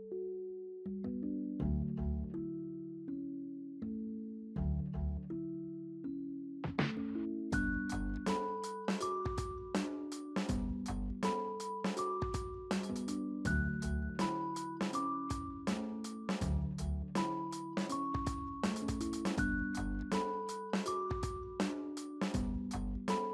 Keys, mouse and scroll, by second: 0.7 double click, 7.6 scroll down 1, 7.9 middle click, 9.3 ctrl+right click, 17.8 middle click, 18.6 right click, 18.9 right click, 19.3 right click.